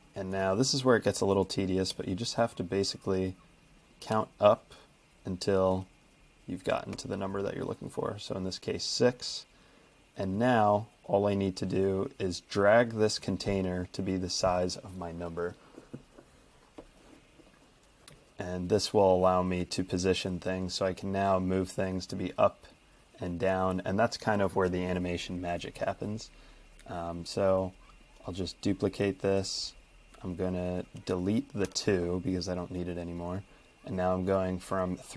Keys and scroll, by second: 0.3 super+d, 1.9 4, 2.4 ⟲, 3.1 super+d, 4.1 5, 4.7 Escape, 5.7 super+d, 6.9 6, 7.6 ↺, 31.7 BackSpace.